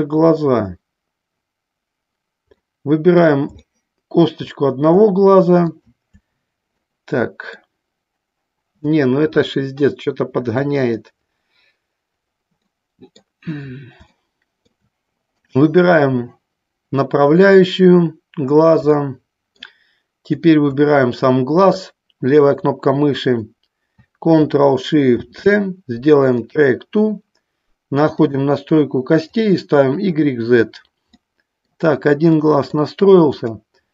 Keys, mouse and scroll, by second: 2.8 middle click, 3.8 shift+middle click, 5.7-8.6 shift+drag, 12.8 middle click, 14.3 shift+middle click, 19.2 shift+middle click, 25.2 ctrl+shift+c, 29.4 click, 30.3 click, 31.3 middle click, 32.5 middle click.